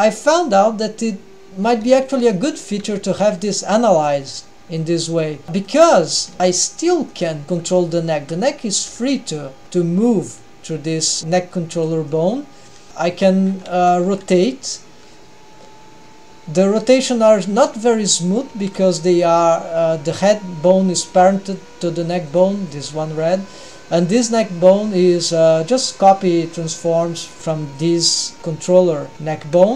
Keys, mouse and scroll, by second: 0.2 g, 3.1-4.9 middle drag, 3.1 g, 4.9 g, 5.4 middle click, 6.7 middle click, 6.7 g, 7.4-8.2 middle drag, 7.4 click, 10.2 g, 12.9 middle click, 12.9 g, 13.9 r, 18.4 r, 22.5-25.4 drag, 26.3-28.9 drag, 29.6 click.